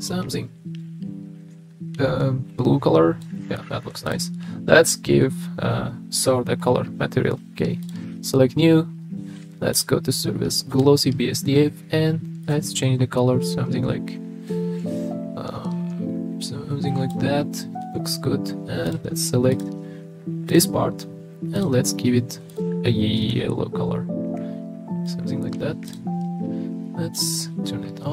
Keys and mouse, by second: 8.0 click, 9.7-10.9 drag, 18.8 click, 19.5 click, 20.5 click, 21.6 drag, 27.1 click.